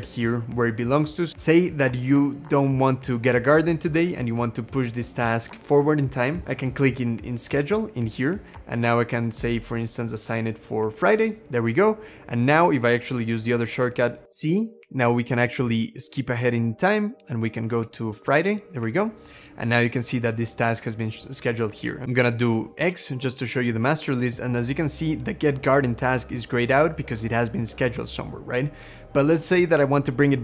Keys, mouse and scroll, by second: 14.2 z, 22.6 x.